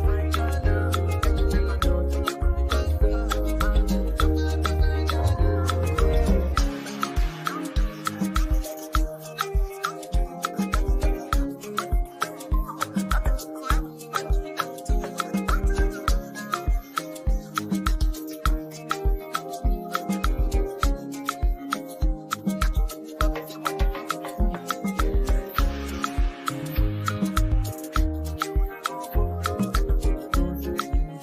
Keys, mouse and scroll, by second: 12.2-23.1 drag, 23.1 v, 24.2-31.2 drag.